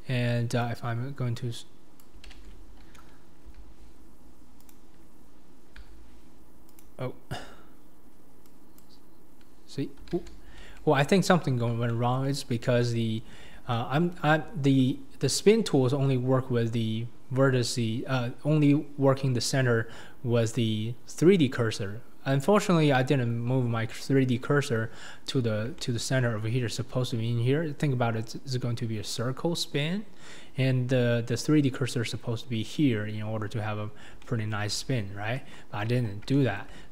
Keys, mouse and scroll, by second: 2.3 ctrl+z, 3.5 r, 5.9 r, 8.5 click, 10.1 ctrl+z, 11.5 scroll down 2, 11.9 shift+middle click, 12.3-12.8 scroll down 6, 12.8 shift+middle click, 13.3-13.7 scroll down 4, 13.7 shift+middle click, 14.2 scroll up 1, 15.0-16.0 scroll up 1, 16.0-19.5 scroll down 2, 19.5 scroll down 1, 19.7-21.2 scroll up 3, 21.2-24.4 scroll down 2, 24.4 scroll up 2, 25.5 scroll down 2, 25.8 shift+middle click, 26.2-29.7 scroll up 4, 33.6-34.2 scroll down 1, 34.2-35.4 middle drag, 35.4 KP_1, 35.9-36.3 scroll down 2, 35.9-36.9 middle drag.